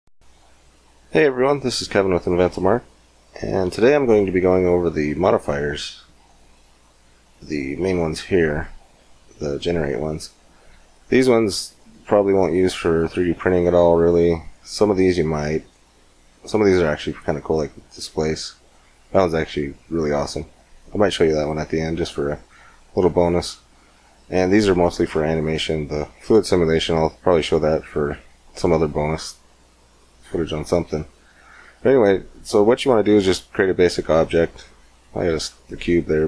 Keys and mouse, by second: 0.0 middle click, 5.5-9.6 drag, 31.9-33.6 middle drag, 34.4 x, 35.1 shift+a.